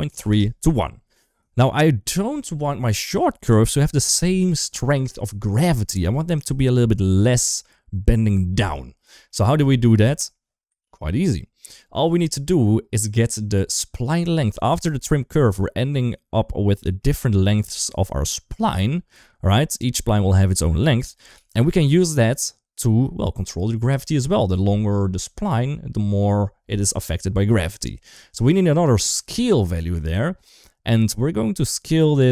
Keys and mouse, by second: 1.3 shift+middle click, 9.1 middle click, 11.1 ctrl+s, 12.0 shift+middle click, 14.6 ctrl+shift+click, 16.7 middle click, 20.6 ctrl+z, 21.2 ctrl+s, 21.7-22.8 shift+middle drag, 28.2 click, 29.0 shift+d, 30.6 click, 32.0 click, 32.2 click.